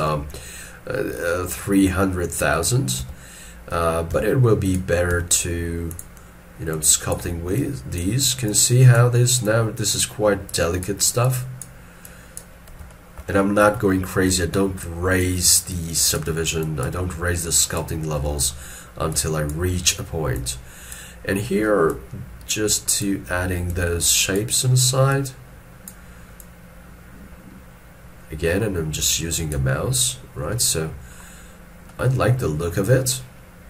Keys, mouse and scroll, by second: 5.1 f, 12.9 shift+middle click, 18.3 middle click, 33.1 shift+middle click.